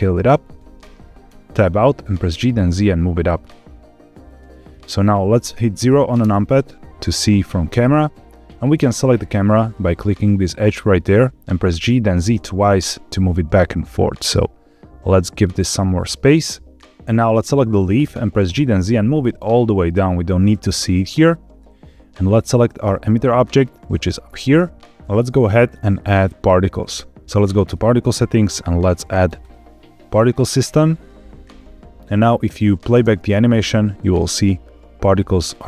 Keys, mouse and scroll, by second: 0.5 click, 1.2 Tab, 1.5-1.9 middle drag, 2.2 g, 2.5 z, 4.2 click, 6.1 KP_0, 8.6 click, 11.6 g, 12.0 z, 12.2 z, 17.0 scroll down 2, 17.2 click, 18.4 g, 18.6 z, 20.9 click, 22.7-23.1 shift+middle drag, 23.7 click, 24.8 scroll up 1, 27.5 click, 29.3 click, 32.8 space.